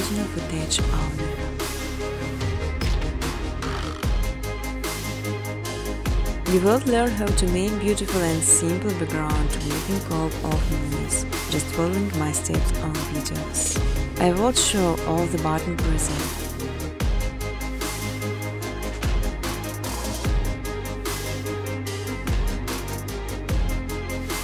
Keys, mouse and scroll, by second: 0.3 click, 0.6 click, 4.9 click, 6.0 click, 7.5-10.2 typing, 11.3 click, 13.9 click, 15.9 click, 16.4 2, 18.5 click, 18.9 space, 20.1 space, 20.4 space, 20.8 space, 21.5-22.9 scroll, 22.9 click, 24.2 click, 24.2-24.4 scroll.